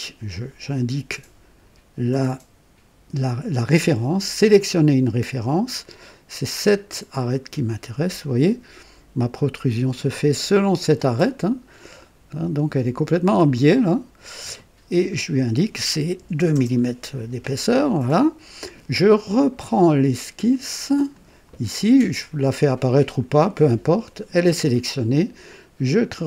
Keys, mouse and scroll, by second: 4.5 click, 7.2 click, 8.2-9.5 drag, 9.9-11.1 drag, 11.1 click, 12.0-14.6 drag, 15.1 click, 16.3 KP_2, 16.5 KP_Enter, 17.5-19.0 drag, 20.2 click, 21.1 click, 26.0 click.